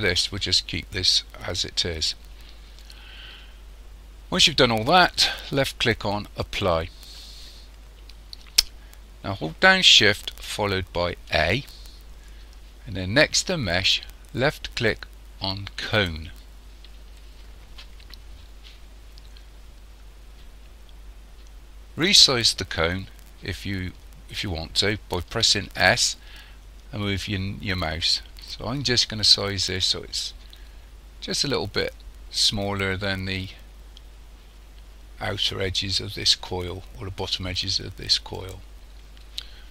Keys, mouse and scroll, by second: 6.4 click, 11.3 shift+a, 25.8 s.